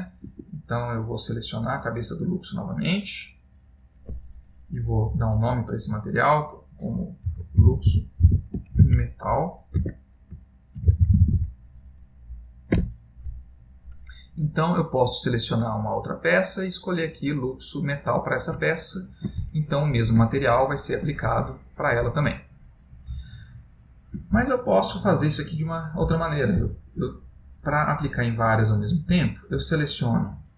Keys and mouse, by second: 2.0 Escape, 2.4 Escape, 2.4 click, 3.3 click, 5.1 click, 14.8 click, 16.5 click, 18.8 ctrl+middle click, 19.6 shift+middle click, 20.6 ctrl+middle click, 21.3 middle click, 23.8 middle click, 24.6 shift+middle click, 27.6 click, 29.6 shift+click, 30.2 shift+click.